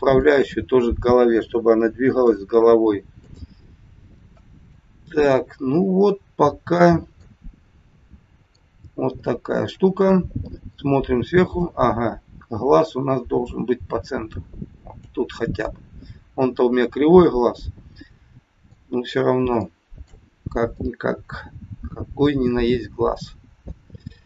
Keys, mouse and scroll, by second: 0.2 shift+click, 2.2 ctrl+p, 4.6 middle click, 7.6 middle click, 8.8 scroll up 2, 9.3 shift+middle click, 9.7 shift+middle click, 10.0 middle click, 10.0 scroll up 1, 11.3 click, 12.8 click, 15.7 middle click, 18.9-19.4 scroll down 4, 19.5 shift+middle click, 20.7 middle click.